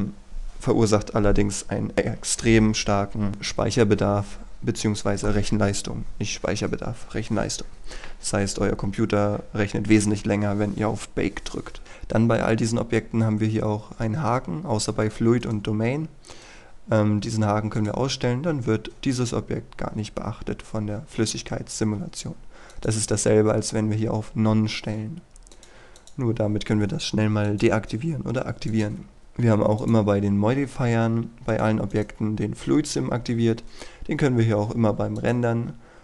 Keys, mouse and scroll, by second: 11.8 right click, 17.9-28.6 drag, 31.6 right click, 35.3-36.0 drag.